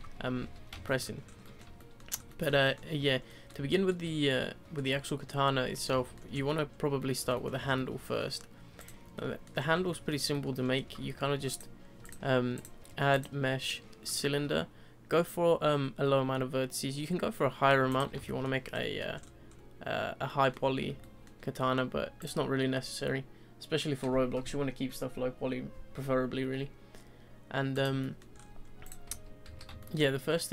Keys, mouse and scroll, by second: 0.3 z, 0.8-1.2 shift+middle drag, 1.2 scroll up 2, 1.4-2.1 middle drag, 2.1 scroll up 2, 2.3-3.0 middle drag, 3.0 scroll down 1, 3.3-4.2 middle drag, 4.2 scroll down 1, 4.4-5.9 middle drag, 5.9-7.0 shift+scroll up 5, 6.0-6.3 shift+middle drag, 7.0-7.6 middle drag, 7.6 scroll up 3, 7.7-8.2 middle drag, 8.2-8.8 scroll down 2, 8.8 click, 9.1-9.5 middle drag, 9.5-9.9 scroll down 2, 9.9-11.5 shift+middle drag, 11.5-12.0 drag, 12.5-15.5 drag, 17.7 scroll down 2, 17.9 click, 18.2 shift+middle click, 18.7-20.2 scroll up 5, 18.8-19.2 middle drag, 20.2-20.6 middle drag, 20.6-21.0 scroll down 2, 21.0-22.2 shift+middle drag, 22.2 click, 27.7 click, 28.0-28.3 middle drag, 28.3-28.8 scroll up 5, 28.8 click, 29.0 z, 29.4 z, 29.8-30.5 shift+middle drag.